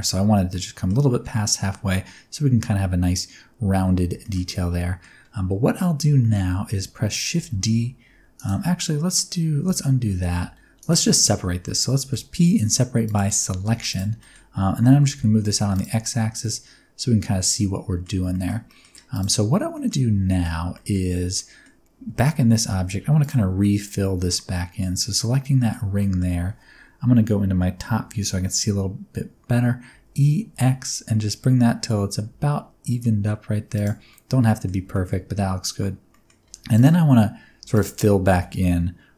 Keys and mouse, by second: 0.4 middle click, 4.2 shift+middle click, 4.4 middle click, 6.2 shift+middle click, 7.3 shift+d, 8.3 click, 8.5 x, 9.6 ctrl+z, 10.0 middle click, 10.3 g, 10.7 right click, 10.8 middle click, 11.9 p, 13.6 Tab, 14.1 middle click, 14.8 g, 15.0 x, 15.7 ctrl+click, 16.0-18.1 middle drag, 18.3 shift+middle click, 18.7 middle click, 19.1 click, 19.7 middle drag, 20.2 shift+middle click, 20.7 middle click, 21.3 middle drag, 21.9 Tab, 22.7 1, 23.1 alt+click, 23.6-24.8 middle drag, 25.3 middle click, 25.9 middle click, 27.8 KP_7, 29.9 e, 30.4 x, 33.7 shift+click, 34.2 middle click, 34.9 shift+middle click, 36.1 middle click, 36.4 2, 36.7 click, 38.3 f.